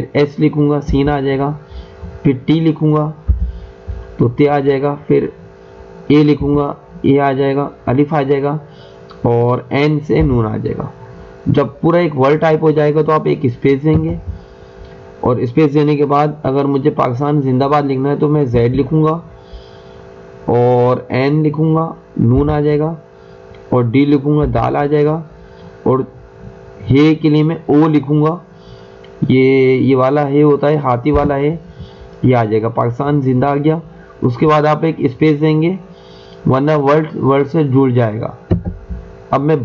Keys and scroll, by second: 0.8 s, 3.3 t, 6.4 a, 10.1 n, 13.9 space, 18.4 z, 22.4 n, 24.4 d, 31.0 o, 38.5 space.